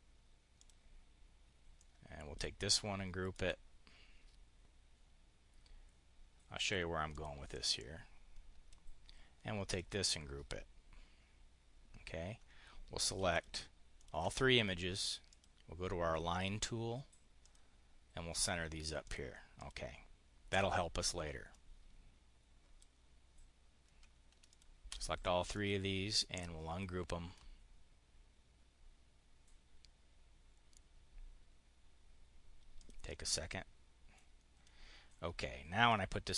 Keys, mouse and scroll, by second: 0.4 click, 1.6 click, 3.2 click, 6.9 click, 7.3-8.6 drag, 9.6 click, 13.2 shift+click, 13.8 shift+click, 15.1 click, 17.3 click, 18.9 click, 19.4 click, 21.3-22.8 drag, 24.4 shift+click, 25.4 click, 32.7 click, 33.2 click, 34.0-36.3 drag.